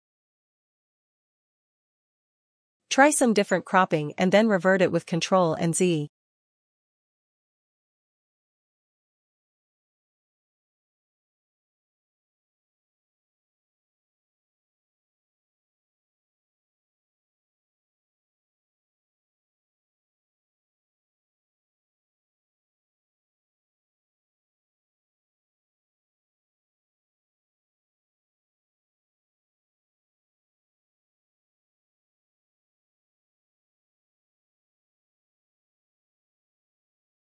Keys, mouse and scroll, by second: 5.2 click, 8.6 click, 11.8 Return, 11.8 click, 27.4-32.5 drag, 27.8 ctrl+z, 36.5-37.3 drag.